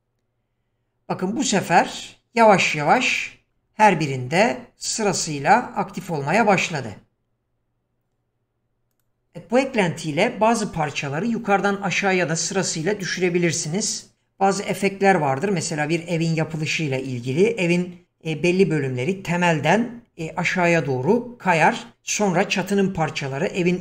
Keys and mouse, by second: 2.9 click, 6.1 click, 8.9 click.